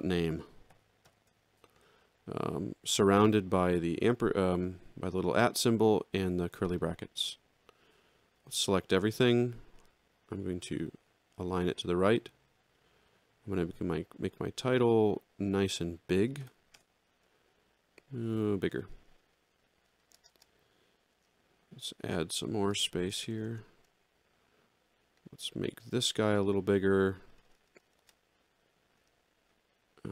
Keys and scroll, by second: 0.7 shift+2, 8.4 ctrl+a, 16.7 Return, 23.1 Return.